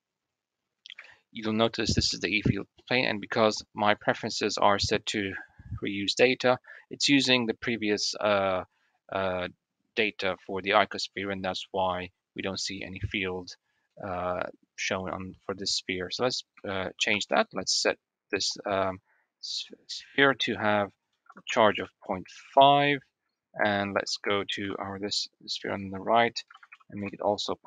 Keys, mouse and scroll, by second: 0.9 shift+middle click, 2.1 shift+middle click, 3.8-6.5 drag, 11.2 click, 11.3 middle click, 11.9 middle click, 12.7 middle click, 13.8 middle click, 16.5 shift+middle click, 17.1 Tab, 20.3-22.4 drag, 22.7 click, 24.5 l, 25.7-26.9 drag.